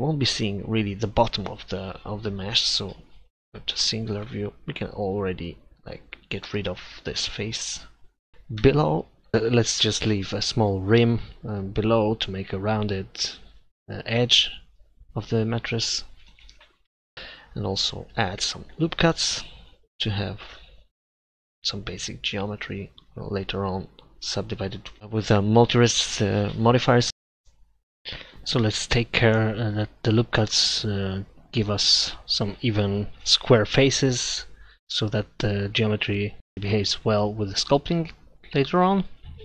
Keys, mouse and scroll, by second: 2.0-3.5 middle drag, 3.5 KP_Divide, 8.6 Delete, 9.5 ctrl+z, 9.7 Delete, 12.1-13.5 right drag, 13.0 click, 14.3 shift+s, 14.9 w, 15.0 Escape, 15.2 e, 17.2-18.6 middle drag, 18.6 ctrl+r, 23.5-25.0 middle drag, 27.9 ctrl+r, 30.1 middle click, 31.8 KP_1, 38.9 ctrl+r.